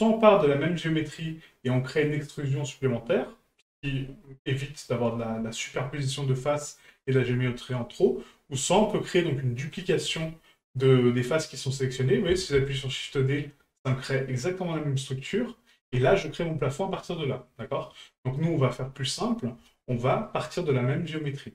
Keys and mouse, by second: 9.7 right click.